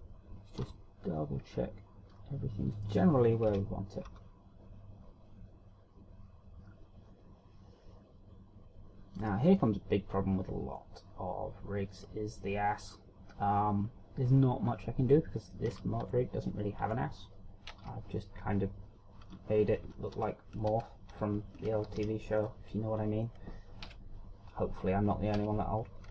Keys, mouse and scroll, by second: 0.4 right click, 1.4 shift+scroll down 6, 1.6 r, 3.8 right click, 4.4 KP_3, 5.1 r, 10.2 click, 10.6 middle click, 12.0 middle click, 16.7 scroll up 1, 17.0 Tab, 17.8 Tab, 18.6 KP_3, 20.8 ctrl+z, 21.1 ctrl+z, 21.7 ctrl+z, 22.6 ctrl+z, 23.0 a, 23.4 middle click, 24.8 KP_1.